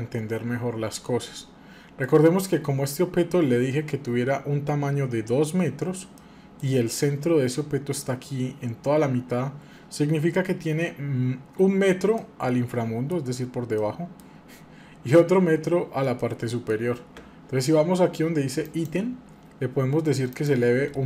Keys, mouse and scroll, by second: 12.2-14.2 middle drag, 16.3-18.6 middle drag, 18.6-21.0 drag.